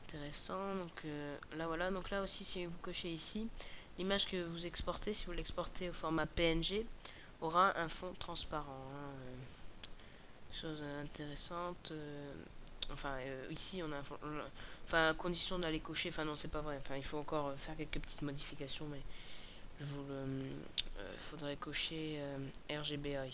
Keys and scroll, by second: 19.3-19.7 scroll down 5.